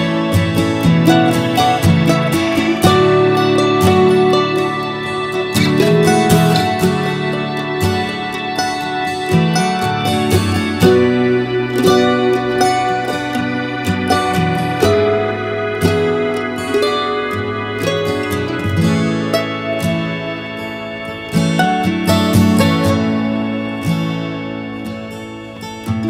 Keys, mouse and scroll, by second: 3.2 alt+space, 5.1 click, 10.3 b, 18.3 click, 23.7 ctrl+z, 24.7 ctrl+z.